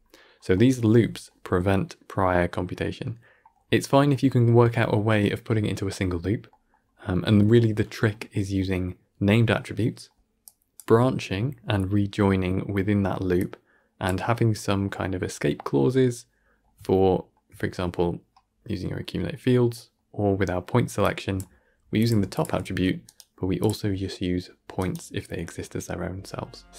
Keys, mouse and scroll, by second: 10.3-26.7 drag, 26.7 ctrl+space.